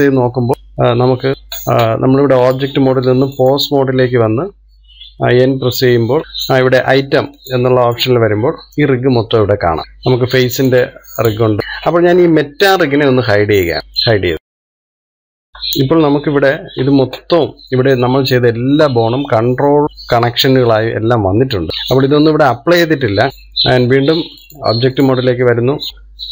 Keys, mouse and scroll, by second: 4.0-6.2 drag, 7.4 click, 9.0 click, 9.5 click, 11.6 click, 12.0 click, 14.7 click, 15.7-16.7 middle drag, 16.7-17.5 scroll up 1, 17.5-19.8 shift+middle drag, 21.0-21.7 middle drag, 21.7 scroll down 4, 21.9-23.4 middle drag, 24.0 n, 25.9-26.3 scroll down 2.